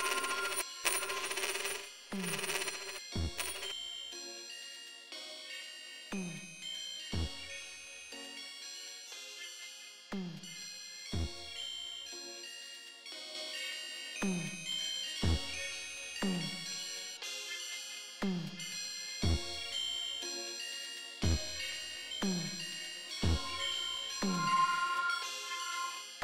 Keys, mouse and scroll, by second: 0.5 space, 2.9 space, 7.1 right click, 10.0 click, 10.8 right click, 13.7 click, 14.5 click, 16.6 click, 19.0 click, 19.6 click, 21.0 right click, 23.0 click, 23.9 click, 24.4-26.0 drag.